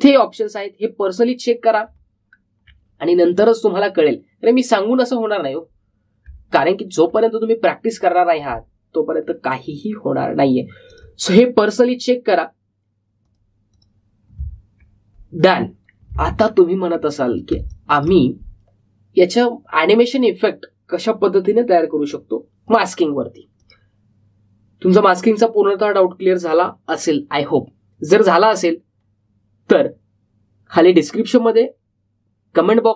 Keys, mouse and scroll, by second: 0.5 click, 3.2-3.6 alt+scroll down 1, 7.2 alt+Num_Lock, 7.2-7.6 alt+scroll down 1, 7.6-8.1 alt+scroll up 1, 8.9 click, 11.9 click, 16.4 click, 17.4-17.9 alt+scroll down 1, 18.5 space, 18.6 click, 18.9 space, 21.1 click.